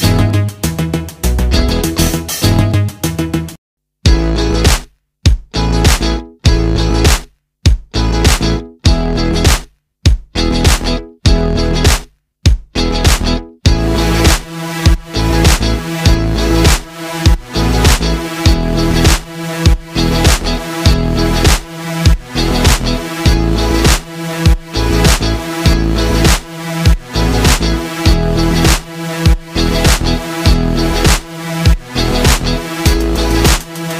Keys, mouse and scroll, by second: 2.0 ctrl+a, 4.8-6.5 drag, 9.6 click, 11.6 alt+scroll down 1, 12.6 click, 15.8 ctrl+shift+g, 16.7 right click, 19.8 click, 23.0 space, 27.8 click, 31.2-33.9 drag.